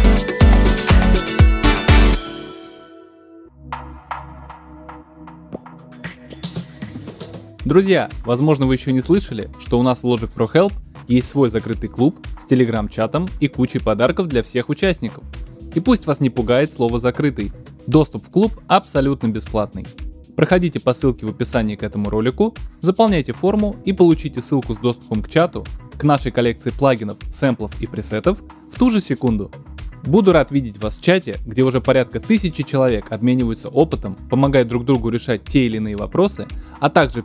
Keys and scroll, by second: 1.9 space.